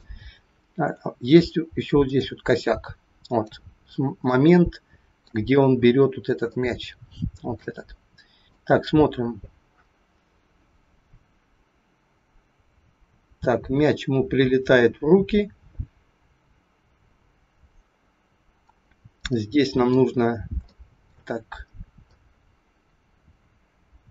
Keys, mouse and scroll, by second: 0.5-2.0 scroll up 5, 2.0 click, 2.7 click, 3.7 scroll up 2, 4.2 shift+middle click, 5.5-5.9 scroll up 3, 6.5 shift+middle click, 8.5 click, 19.1 middle click, 20.2-20.6 scroll up 2, 20.7 shift+middle click, 22.1 click.